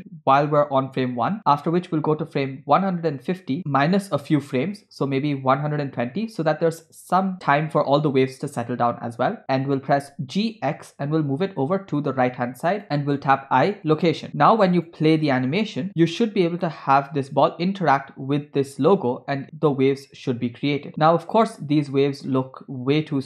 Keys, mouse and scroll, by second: 0.0 i, 2.5 click, 4.9 click, 10.1 g, 12.8 scroll down 3, 13.5 i, 14.9 click, 15.3 space, 16.5-17.0 scroll up 2.